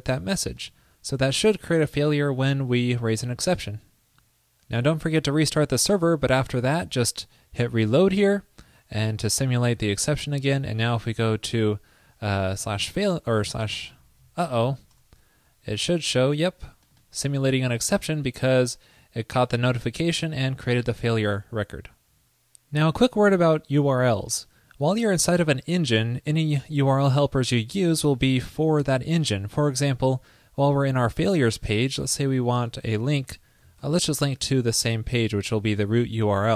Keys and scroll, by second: 2.3 super+s, 32.9 ctrl+shift+<, 33.9 ctrl+shift+>.